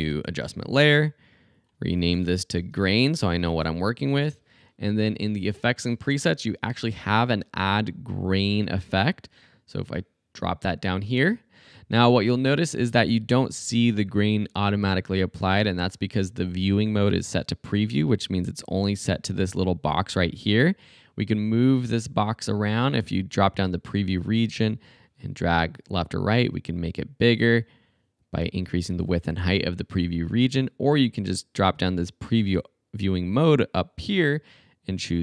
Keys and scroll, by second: 0.0 alt+super+y, 2.0 Return, 2.2-4.0 typing, 6.2-7.3 typing.